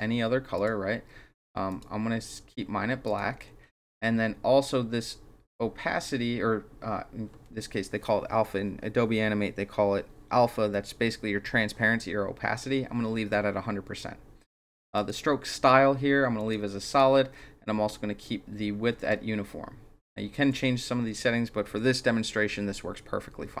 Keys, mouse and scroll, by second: 0.6 click, 1.3 click, 1.7 click, 3.1 click, 15.0 click, 16.4 click, 16.9 click, 19.0 click.